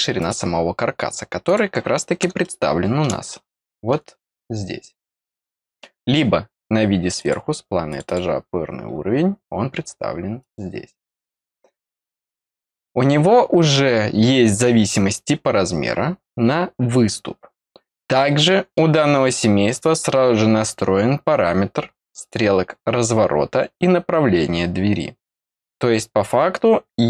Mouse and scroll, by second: 0.1 click, 1.4 click, 2.4 middle click, 3.2 middle click, 7.1 click, 7.8 click, 8.0 click, 9.2 middle click, 9.2-10.3 scroll up 2, 9.4 middle click, 10.3 click, 12.2 click, 13.0-13.8 scroll down 2, 18.1 middle click, 22.1 click.